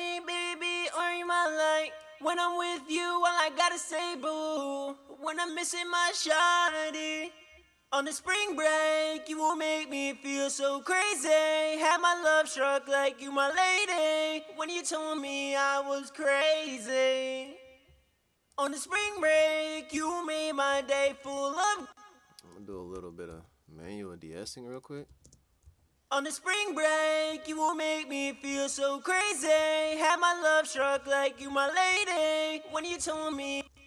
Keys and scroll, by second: 19.1 super+`, 22.9-23.3 typing, 25.2 space, 30.9 ctrl+shift+-.